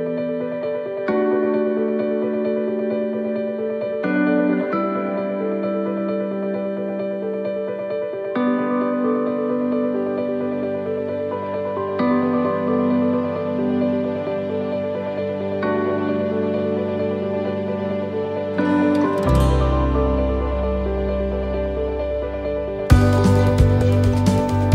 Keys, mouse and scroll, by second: 2.0-9.1 click, 9.1 scroll up 1, 9.6 scroll down 1, 22.2 scroll down 2, 22.3 shift+middle click, 22.7 scroll up 1.